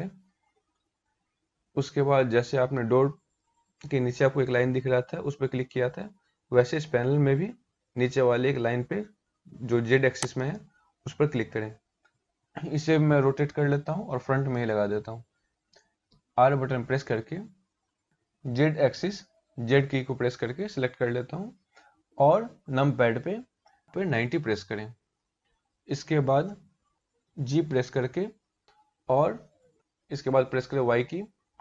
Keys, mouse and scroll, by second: 9.9 click, 14.9 r, 15.7 r, 27.3 g.